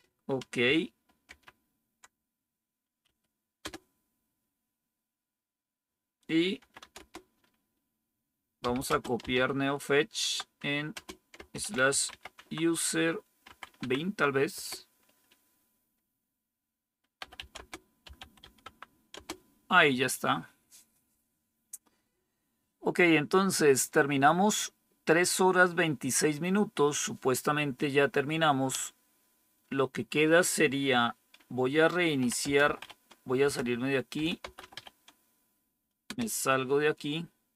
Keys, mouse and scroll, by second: 1.2 ctrl+-, 2.9 Up, 3.5 Return, 6.2-7.2 typing, 8.3-14.5 typing, 16.9-19.0 typing, 31.9-35.2 typing, 33.3 Return, 36.0 Return.